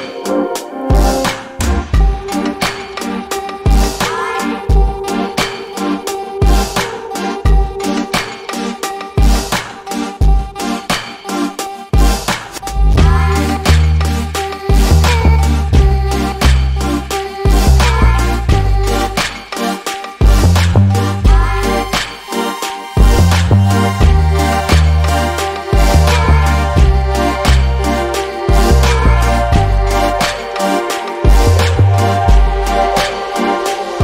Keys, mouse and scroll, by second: 0.3 click, 3.3 right click, 4.4 click, 4.8 alt+middle click, 5.4 alt+click, 5.9-6.4 scroll up 1, 6.4 alt+click, 9.5-10.3 scroll down 1, 10.9 click, 11.2-11.7 scroll down 1, 12.1 alt+click, 13.8 alt+middle click, 14.1 scroll down 1, 14.6 alt+click, 16.6 alt+middle click, 16.9 alt+click, 17.7 alt+middle click, 18.0 scroll up 1, 18.6 middle click, 20.3-20.9 scroll up 1, 20.9 alt+middle click, 21.6-21.9 scroll down 1, 22.5 click, 23.1 scroll down 1, 24.9 click, 26.0 click, 29.5 scroll up 1, 30.9 click.